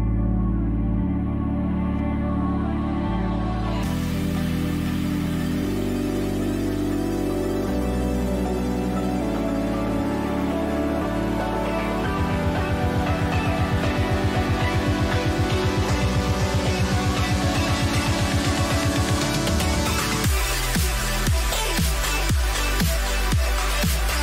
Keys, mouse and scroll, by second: 0.6-1.9 middle drag, 1.9 a, 2.3 Tab, 11.4 Tab, 17.6 Tab, 20.7 a, 20.9 a, 21.3 middle click, 21.3 a, 22.4-24.2 drag.